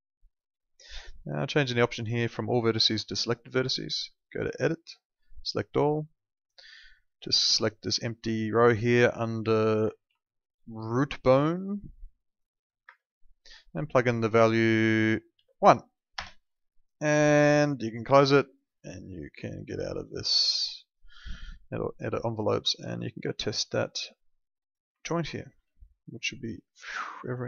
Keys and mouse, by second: 1.1 click, 1.6 click, 10.0 ctrl+2, 12.8 Escape, 14.7 click, 15.3 1, 16.1 Return, 18.0 click, 22.5 alt+middle click, 23.3 alt+middle click, 24.6 click, 25.1 alt+middle click, 25.6 e, 26.3 click.